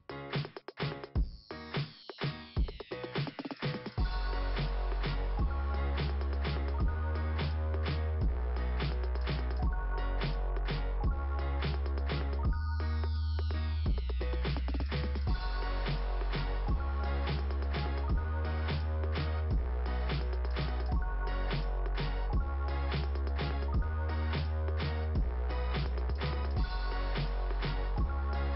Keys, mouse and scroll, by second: 0.0-2.0 typing, 2.2 Return, 2.5 Return, 3.1 Return, 3.9 Return, 4.6 right click, 6.4 click, 9.2-9.5 scroll down 1, 10.2 scroll down 1, 10.6 click, 11.5 scroll down 1, 12.1 click, 13.5 click, 14.5 click, 14.6 click, 17.1 click, 18.6 click, 19.6 click, 22.3 click, 22.9 click, 23.6 click, 24.5 click, 25.0 click, 26.7 right click, 27.8 click, 28.1 click.